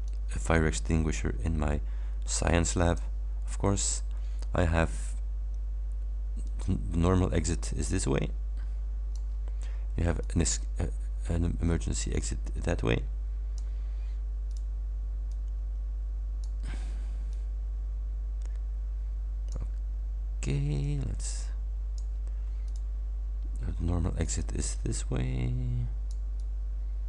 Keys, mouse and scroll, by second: 0.1-3.3 drag, 6.5-9.4 drag, 10.3-13.8 drag, 14.5 click, 15.3-16.7 drag, 17.3-19.7 drag, 20.9-22.2 drag, 22.7 click, 24.3-26.4 drag, 26.7-27.0 drag.